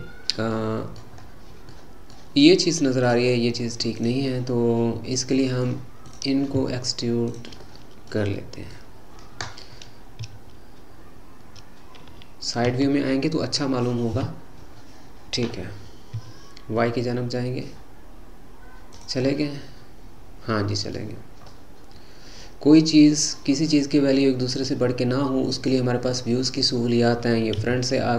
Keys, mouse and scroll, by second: 1.2-1.7 scroll up 2, 1.7-3.0 middle drag, 3.0 click, 3.9 click, 4.2-6.1 middle drag, 6.1 click, 7.3 shift+click, 7.7-9.0 middle drag, 9.0-10.3 scroll down 1, 10.3 e, 14.1 KP_3, 16.1 e, 19.2-21.2 middle drag, 21.2-21.5 scroll up 2, 21.5-26.2 middle drag, 26.2-26.7 scroll down 3, 26.7 middle click, 27.6 KP_1.